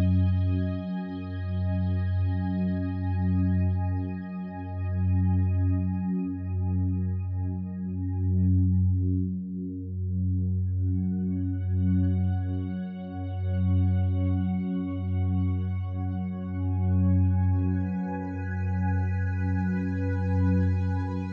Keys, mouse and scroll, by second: 0.1 Escape.